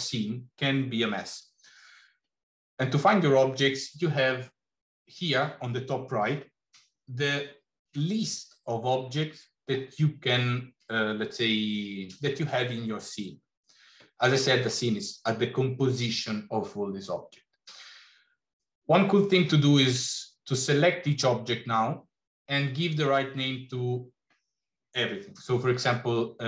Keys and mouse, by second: 19.8 click.